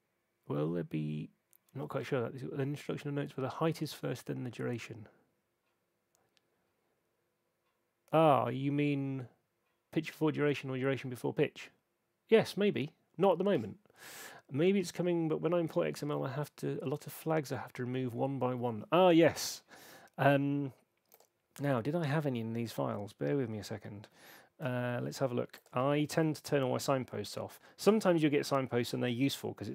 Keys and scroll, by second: 25.8 alt+super+s.